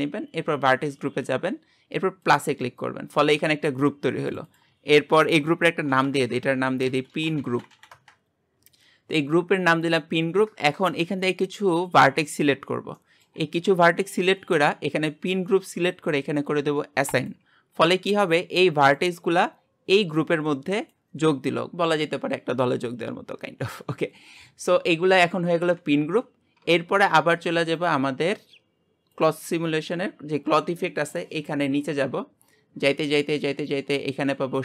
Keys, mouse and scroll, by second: 2.3-4.4 drag, 10.4-10.8 scroll down 1, 10.8-12.4 scroll up 2, 12.4 alt+shift+click, 13.0-17.3 shift+middle drag, 17.3-26.6 drag, 26.6 Tab.